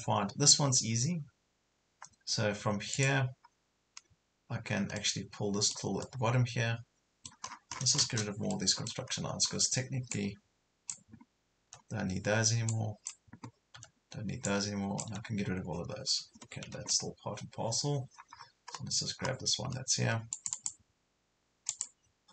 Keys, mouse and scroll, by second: 2.9 click, 3.5 scroll up 1, 5.0-7.5 middle drag, 7.5-8.0 scroll down 1, 8.5 middle click, 9.1 scroll down 1, 10.1-11.5 drag, 11.5 scroll up 1, 11.7 Delete, 12.7 click, 13.8 Delete, 14.5 click, 15.1 Delete, 18.4 scroll up 1, 20.3 click, 21.5 scroll down 1, 21.7 click.